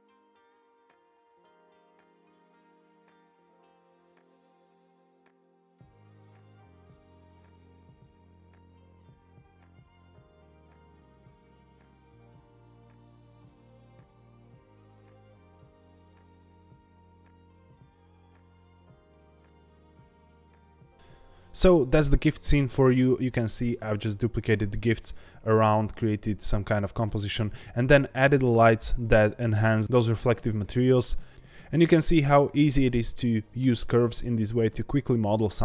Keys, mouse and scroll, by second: 0.6 scroll down 2, 0.8 click, 1.0 scroll up 3, 2.2 click, 4.4 scroll down 3, 4.6 scroll up 2, 4.9 click, 5.4 click, 5.7 click, 8.2-8.6 scroll up 3, 8.6 shift+d, 10.6 g, 11.3 scroll down 2, 11.5 click, 12.0 g, 12.3 z, 13.1 scroll up 1, 13.5-15.3 drag, 15.6 click, 17.8 click, 18.0 middle click, 18.2-18.5 scroll down 3, 18.5 KP_0, 18.7 ctrl+s, 18.9 click, 19.0 click, 19.2 g, 19.6 g, 20.1 scroll up 3.